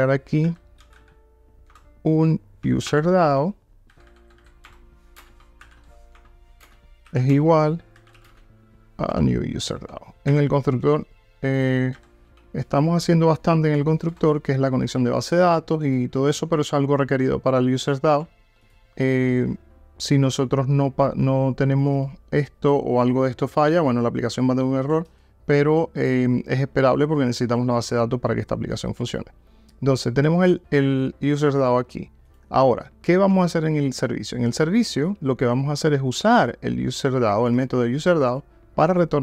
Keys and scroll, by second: 1.8 Return, 4.7 Return, 9.2 Return, 18.8 super+b.